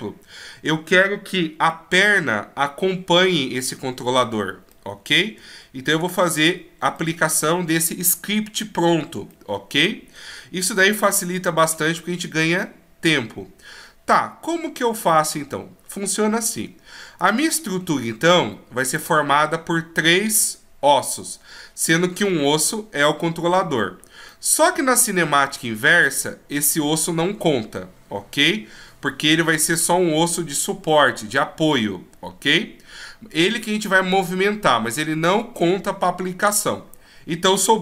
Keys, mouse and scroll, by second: 4.7 middle click, 5.6-7.0 shift+scroll down 1, 7.0 middle click, 7.0-7.9 shift+scroll down 3, 17.2 right click, 18.2 shift+right click, 24.3 middle click, 26.6 right click, 37.6 right click.